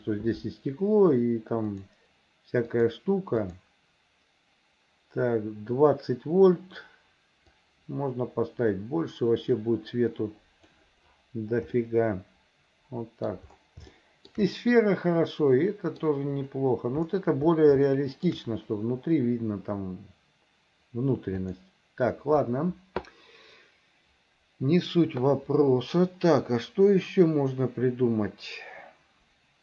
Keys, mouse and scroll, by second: 1.7 click, 2.7 click, 3.4 click, 7.6-10.8 drag, 11.8-13.3 middle drag, 14.0 shift+middle click, 14.6-16.1 middle drag, 17.9 shift+middle click, 21.4 click.